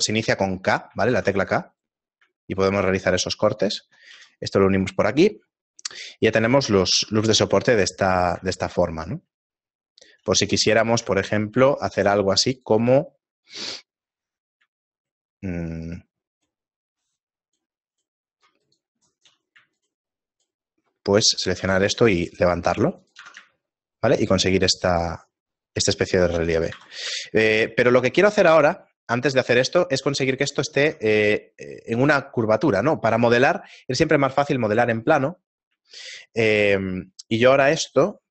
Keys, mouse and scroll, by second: 1.1 ctrl+Tab, 1.8 right click, 3.0 right click, 4.1 a, 4.5 middle click, 5.4 scroll down 2, 6.4 middle click, 6.4 scroll down 4, 7.0 Tab, 7.6 middle click, 8.4 Tab, 9.0 middle click, 10.0 shift+middle click, 12.1 ctrl+Tab, 12.1 middle click, 13.5 alt+right click, 15.0 shift+right click, 15.4 shift+middle click, 16.4 shift+right click, 16.9 shift+right click, 18.4 shift+right click, 18.8 shift+right click, 19.0 shift+middle click, 19.6 middle click, 20.4 shift+right click, 21.0 shift+middle click, 21.5 g, 24.2 Tab, 24.2 shift+middle click, 26.7 ctrl+z, 27.2 shift+middle click, 29.2 KP_7, 30.2 Tab, 31.3 Tab, 31.3-32.0 scroll down 4, 32.1 shift+middle click, 35.9 shift+middle click.